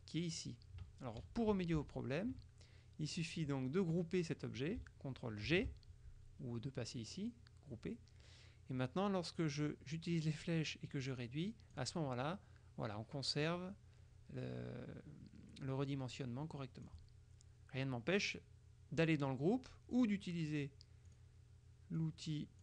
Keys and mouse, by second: 1.9 z, 3.3 click, 5.6 ctrl+g, 9.7-12.3 drag, 16.3-17.4 drag, 20.0 click, 21.1 click, 22.1 click.